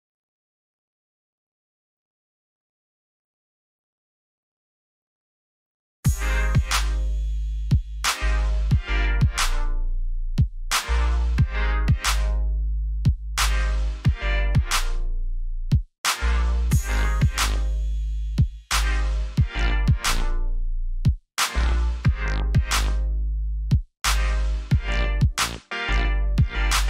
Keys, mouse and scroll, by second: 2.6 click, 8.5 alt+scroll up 1, 9.3 alt+scroll down 1, 10.6 s, 12.2 click, 15.1-15.7 scroll down 1, 15.7 click, 18.2-19.8 typing, 23.6 click, 25.7 alt+scroll up 1.